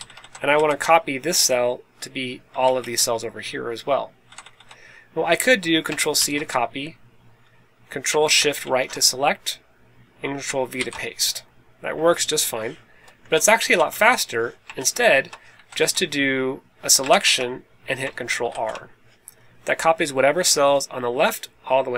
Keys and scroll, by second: 0.1 Left, 0.4 Left, 2.5 Right, 2.8 Right, 4.2 Left, 6.1 super+c, 8.5 shift+super+Right, 10.7 super+v, 12.9 Escape, 13.2 Left, 13.6 Right, 14.7 super+z, 15.5 Left, 15.7 Right, 17.0 shift+super+Right, 18.4 super+r.